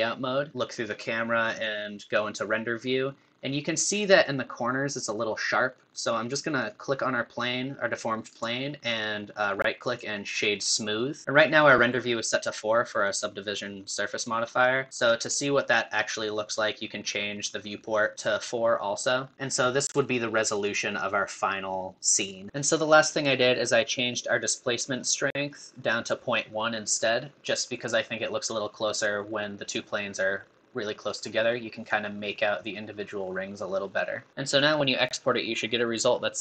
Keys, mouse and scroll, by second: 0.5 KP_0, 0.8 scroll up 1, 1.6 click, 2.5 scroll up 1, 3.6-4.0 scroll up 4, 6.8 click, 10.6 right click, 11.2 KP_0, 17.4-18.1 drag, 22.5-34.3 click.